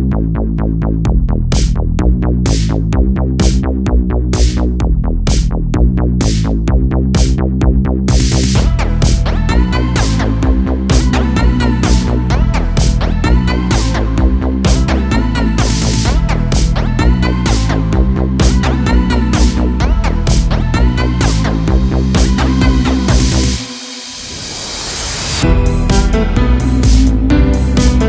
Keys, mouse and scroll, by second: 0.5 scroll down 1, 3.2 click, 4.7 click, 7.7 click, 8.3 scroll down 3, 8.8 a, 9.0 a, 9.7-10.4 scroll up 1, 10.7 click, 11.9 click, 17.1 click, 17.4 scroll down 4, 18.0 shift+a, 24.5 click, 27.6-28.0 scroll up 4.